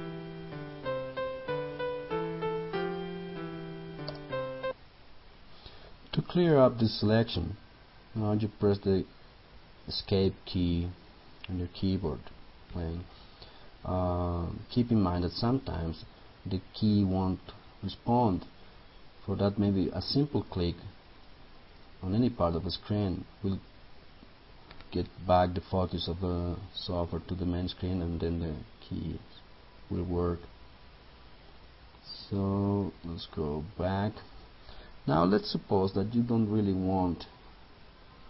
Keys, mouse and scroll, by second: 4.1 space, 4.6 click, 12.2 Escape, 20.6-38.2 drag.